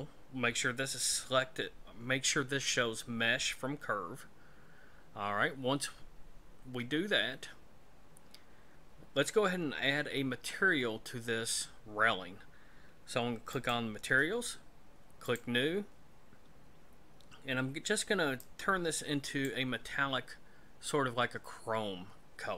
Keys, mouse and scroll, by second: 13.5 click, 15.3 click, 16.6-18.3 scroll down 4, 18.4 click.